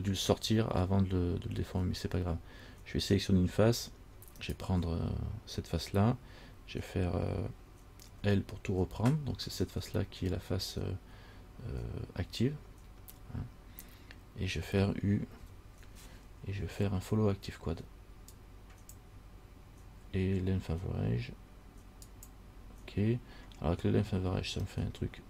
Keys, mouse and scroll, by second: 4.6 right click, 8.3 l, 15.6 u, 25.0 middle click.